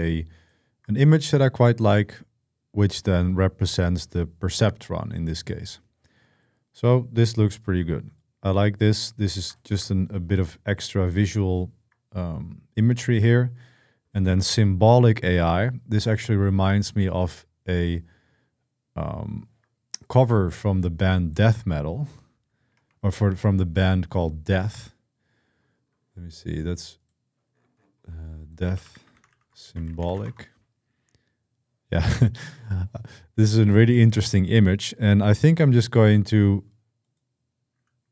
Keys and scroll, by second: 22.6 super+1, 28.2-30.4 typing.